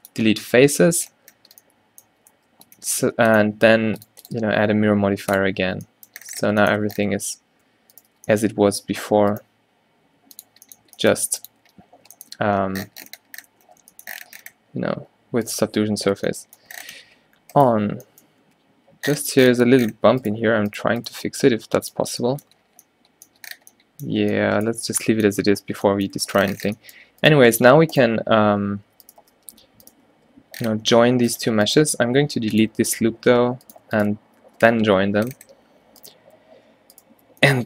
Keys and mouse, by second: 2.5 Tab, 7.4 Tab, 8.3 g, 11.0 g, 11.8 Tab, 12.4 a, 13.7 Tab, 14.6 Tab, 15.1 Tab, 16.2 -, 17.1 g, 18.0 o, 18.5 g, 21.3 g, 22.1 Tab, 25.5 a, 25.9 a, 28.6 Tab, 29.0 Tab, 29.6 Tab, 30.3 g, 32.1 x, 33.5 Tab, 35.0 ctrl+j, 35.7 Tab.